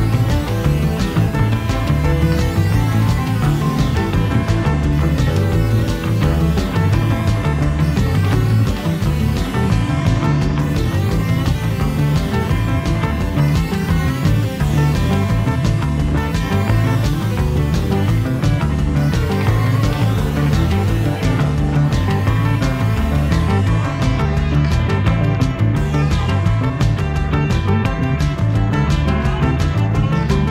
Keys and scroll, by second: 1.5 i, 4.5 v, 24.7 super+z.